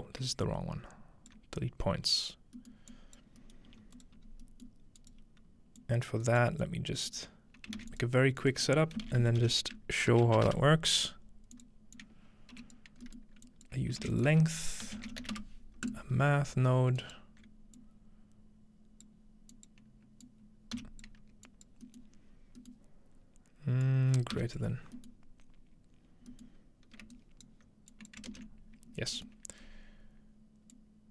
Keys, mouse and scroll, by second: 0.3 scroll down 1, 0.5 alt+click, 1.6 click, 2.9 click, 3.5 scroll up 1, 3.7 g, 3.9-6.4 drag, 6.2 right click, 6.6 click, 7.8 shift+a, 7.9-8.6 shift+drag, 8.8-9.9 typing, 9.0-10.1 drag, 11.5-13.5 drag, 12.5 typing, 13.7 shift+click, 14.0-15.8 typing, 14.3 shift+click, 15.9 click, 17.0 alt+click, 17.0 alt+right click, 17.8-19.9 drag, 20.2 click, 20.8 t, 21.5 click, 21.9-23.2 drag, 23.8-26.3 drag, 24.4 g, 27.2-28.3 alt+right drag, 27.9-28.3 alt+drag, 29.2-30.5 middle drag, 29.7-31.1 scroll up 2, 30.7-31.1 drag.